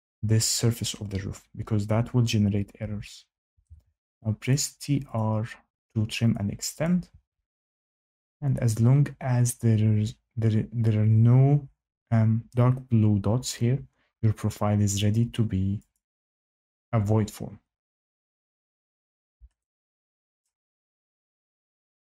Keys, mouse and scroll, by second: 2.7 Escape, 3.2-4.1 typing, 4.4 click, 5.1 click, 6.3 click, 6.8 click, 7.0 Escape, 7.3 Escape, 7.9 click, 15.9 click, 18.3 click, 20.4 shift+middle click.